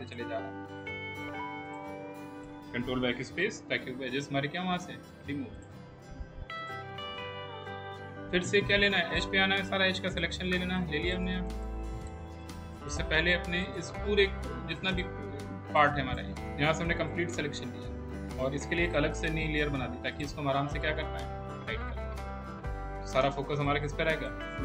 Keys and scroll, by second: 3.4 ctrl+BackSpace, 23.4 space.